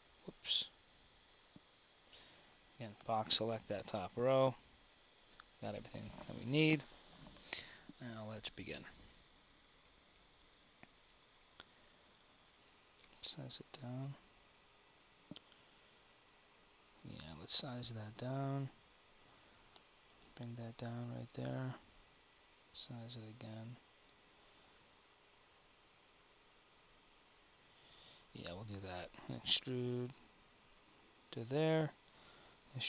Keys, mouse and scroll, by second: 1.3 KP_1, 2.6 b, 5.3 KP_1, 5.7 KP_1, 11.2 z, 12.9 s, 27.5 KP_1, 29.1 e, 32.4 e.